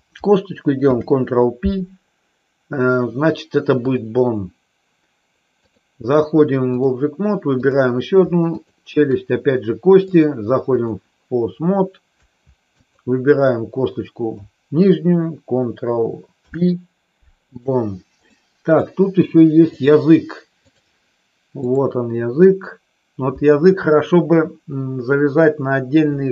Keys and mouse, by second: 0.7 ctrl+p, 5.6-6.8 drag, 7.5 click, 10.0 click, 12.8 click, 16.3 ctrl+p, 18.2 middle click, 19.7-20.8 drag.